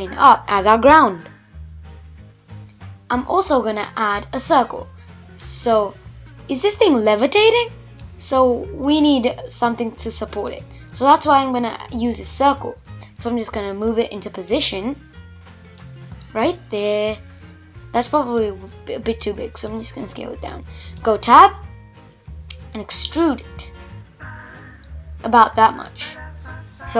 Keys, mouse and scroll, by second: 0.5 shift+a, 3.0-4.2 middle drag, 4.2 s, 7.1 click, 8.6 scroll down 1, 8.7-10.8 middle drag, 10.8 g, 14.4-17.0 middle drag, 17.0 s, 18.4 Tab, 18.6-19.8 middle drag, 19.8 f, 20.8 e, 23.5 middle click, 24.1 scroll up 2, 24.4 middle click, 24.9-25.3 scroll up 2, 25.3 middle click, 26.2 scroll up 1, 26.3 middle click.